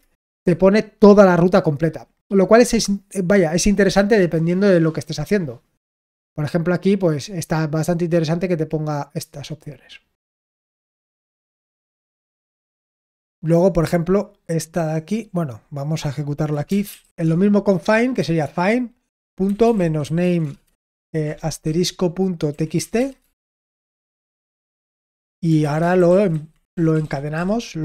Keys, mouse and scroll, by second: 10.9-13.8 scroll down 1, 13.8-15.0 drag, 15.2-16.5 drag.